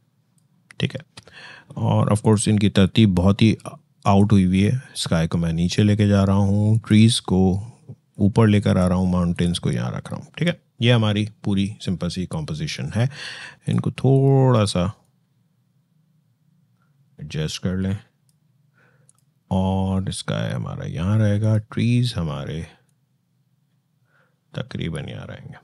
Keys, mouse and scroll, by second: 6.5 click, 13.5-18.9 shift+drag, 21.2-25.6 shift+drag.